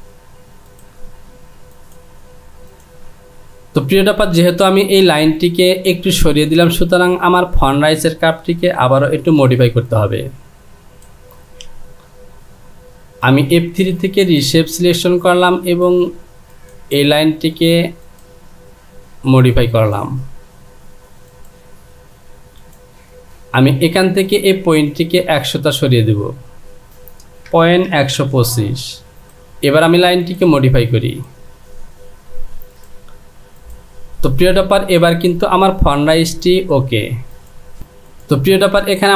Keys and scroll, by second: 9.3 Return, 28.5 KP_5, 28.8 Down.